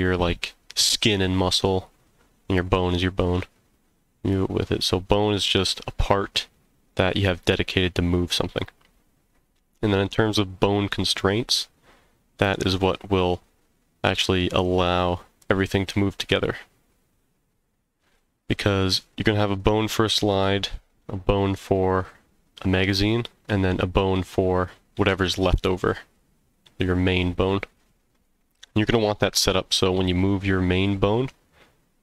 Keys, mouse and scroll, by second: 4.3-4.9 middle drag, 10.2-12.5 middle drag, 13.3-14.1 middle drag.